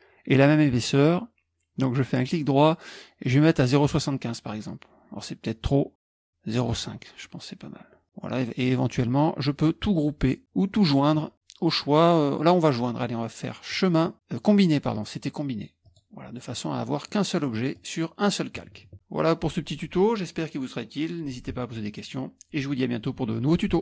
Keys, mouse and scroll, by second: 0.1-3.9 scroll up 1, 4.2 click, 4.6 click, 5.9 click, 6.6 click, 13.7-19.1 drag.